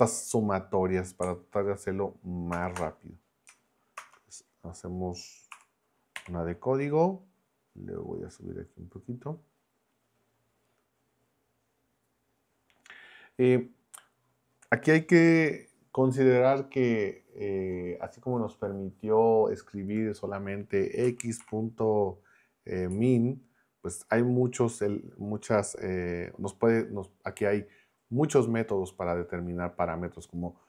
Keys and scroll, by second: 2.5 ctrl+Return, 4.0 shift+Return, 5.5 Escape, 6.2 y, 21.0 x, 21.4 ., 22.9 m.